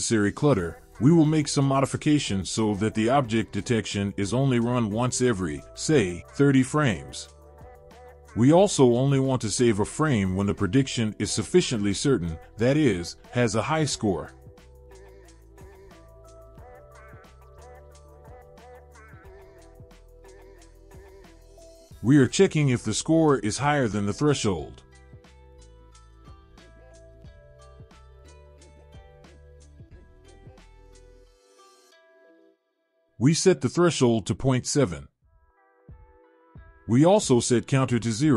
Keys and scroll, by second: 22.3 ctrl+v, 23.4 space, 28.6 ctrl+c, 34.8 ctrl+v, 36.4 BackSpace.